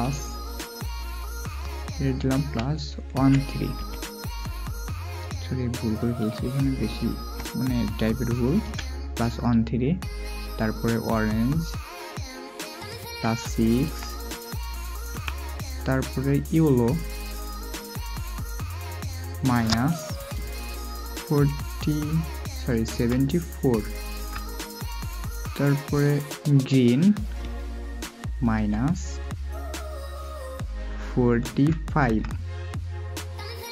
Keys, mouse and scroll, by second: 2.3 typing, 22.9 typing, 24.1 typing, 28.5 typing, 31.5-32.0 typing.